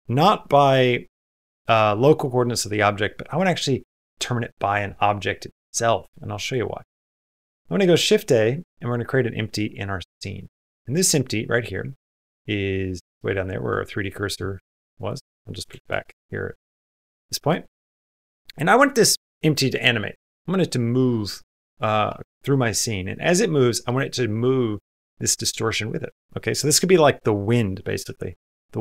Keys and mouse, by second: 3.5-5.7 drag, 7.2 shift+a, 10.7 click, 11.7-13.0 middle drag, 13.8 middle click, 14.7 click, 16.4 middle click, 16.9 shift+middle click, 17.2 middle click.